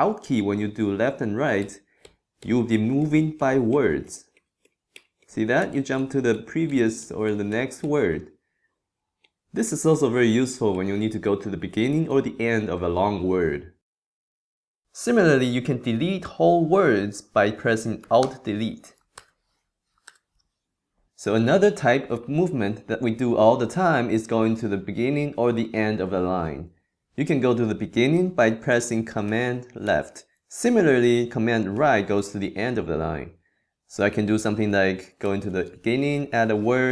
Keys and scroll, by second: 1.6 alt+Left, 3.0 alt+Right, 5.6 alt+Left, 9.2 alt+Right, 9.9 alt+Left, 10.7 alt+Right, 12.1 alt+Left, 12.7 alt+Right, 13.9 alt+Left, 18.2 alt+BackSpace, 19.2 alt+BackSpace, 20.1 alt+BackSpace, 29.8 super+Left, 31.7 super+Right, 35.2 super+Left, 36.0 super+e, 36.1 |.